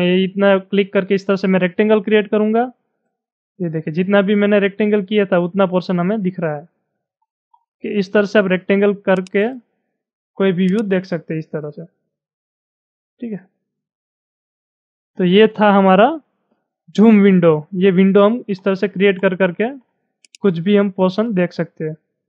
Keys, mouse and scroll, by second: 6.7-7.2 scroll down 10, 9.2 click, 10.7-13.8 drag, 18.0-18.5 scroll down 7, 18.9-19.7 scroll down 11, 20.3-22.2 drag.